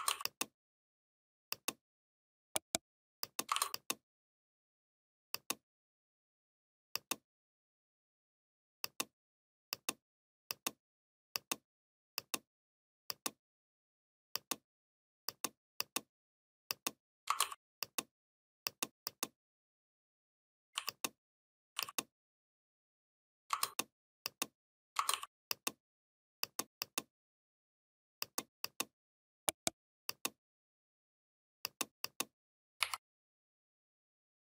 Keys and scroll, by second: 32.6 Down.